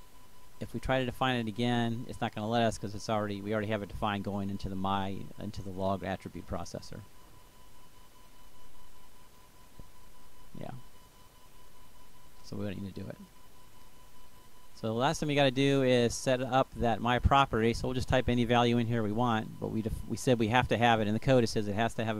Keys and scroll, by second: 19.2-21.5 typing.